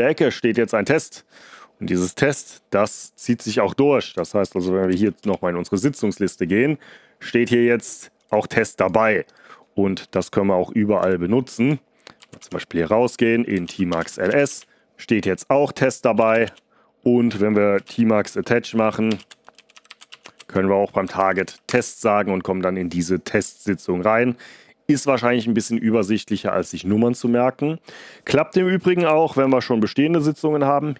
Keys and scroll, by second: 4.8 ctrl+b, 5.1 s, 10.9 Return, 12.1 ctrl+b, 12.3-14.8 typing, 16.1 Return, 16.3 Return, 16.4 Return, 17.4-21.9 typing, 28.9 ctrl+b, 29.2 (.